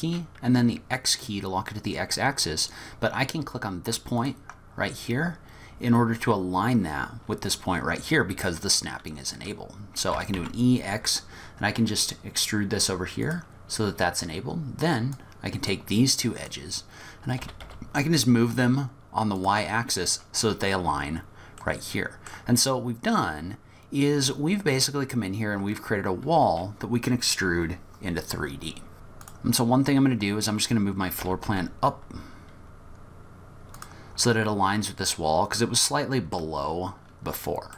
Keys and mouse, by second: 10.2 e, 15.2-16.5 drag, 17.4 g, 21.6 middle click, 24.7 middle click, 28.9 Tab, 29.2 click, 31.2 g, 35.2 middle click, 35.3-36.2 drag, 36.1-36.5 middle drag.